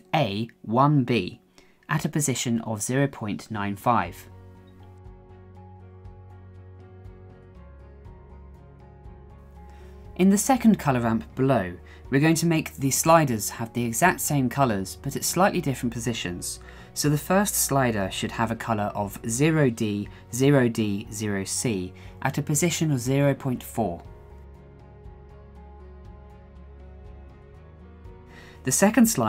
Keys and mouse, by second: 7.0 middle click, 8.2-9.8 middle drag, 10.2 KP_1, 12.5 shift+middle click, 13.2 shift+middle click, 13.6 shift+middle click, 14.8 click, 21.2-23.5 drag, 23.8 click, 25.7 click.